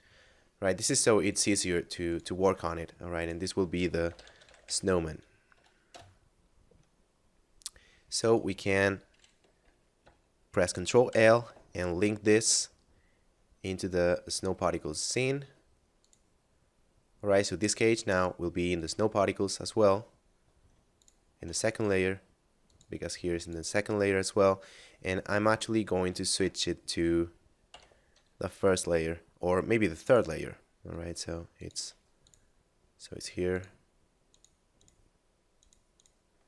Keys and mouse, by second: 1.3 click, 3.8-4.7 typing, 5.9 Return, 8.1 right click, 16.0 click, 17.3 right click, 18.1 click, 20.9 shift+click, 21.7 right click, 22.7 click, 25.5 click, 26.1 right click, 26.3 x, 27.7 m, 30.0 click, 32.3 shift+click, 33.5 shift+click, 34.3 shift+click, 35.5 shift+click, 35.9 shift+click.